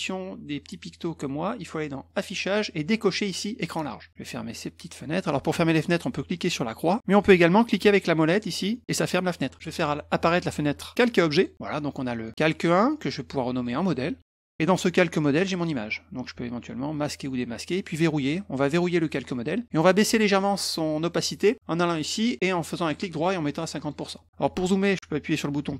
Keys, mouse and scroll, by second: 2.1 click, 6.8 click, 8.7 middle click, 11.3 click, 11.9 click, 13.5 click, 13.7 click, 14.0-15.0 typing, 16.9 click, 17.3 click, 18.2 click, 22.8 right click, 23.8 click.